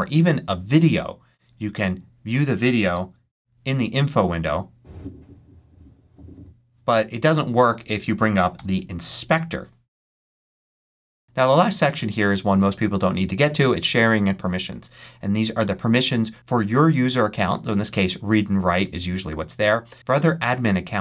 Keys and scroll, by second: 2.8 super+i, 8.4 alt+super+i.